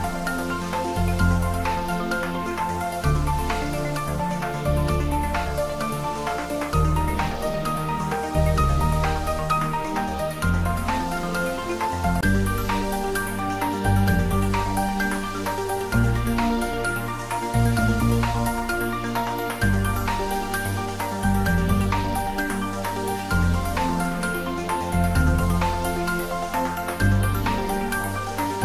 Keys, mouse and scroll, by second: 0.6 `, 1.0 3, 2.5-4.4 scroll up 1, 5.2 `, 5.5 3, 7.4 `, 10.9-13.5 drag, 13.5-15.8 scroll up 1, 16.0-19.9 drag, 19.9-26.3 right drag, 26.3 click.